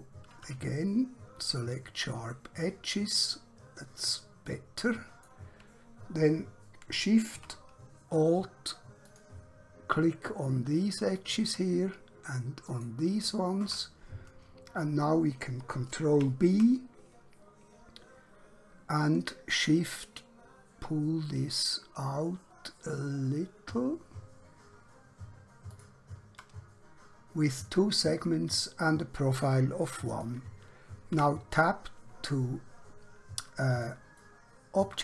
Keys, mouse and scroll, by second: 0.5 q, 1.4 click, 4.5 middle click, 9.0 alt+shift+click, 11.1 alt+shift+click, 12.7 alt+shift+click, 14.9-15.5 scroll down 1, 16.0 ctrl+b, 18.9 shift+Num_Lock, 25.7 shift+click, 30.1 click, 31.2 Tab, 32.2 middle click, 34.2 shift+middle click.